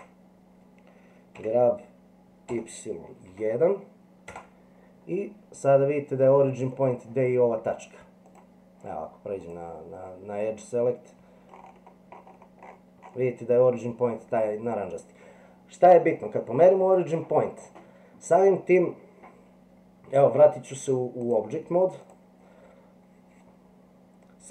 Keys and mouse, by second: 1.3 g, 5.3 middle click, 8.3 click, 9.4 click, 21.3-22.1 drag.